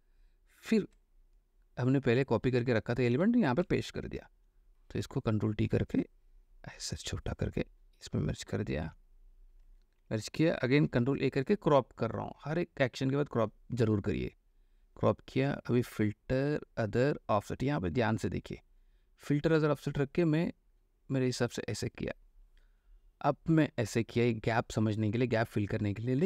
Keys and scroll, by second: 2.6 ctrl+v, 3.3 ctrl+v, 4.0 ctrl+t, 9.1 Return, 10.1 ctrl+e, 10.9 ctrl+a.